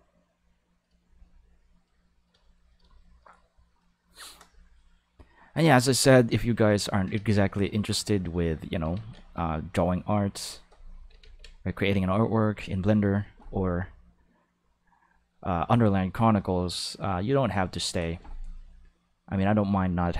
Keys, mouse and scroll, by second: 5.5 click, 7.1 ctrl+z, 7.9 click, 8.9 ctrl+z, 9.4 click, 11.2 ctrl+z, 11.7 click, 14.0-18.2 drag, 19.6 click.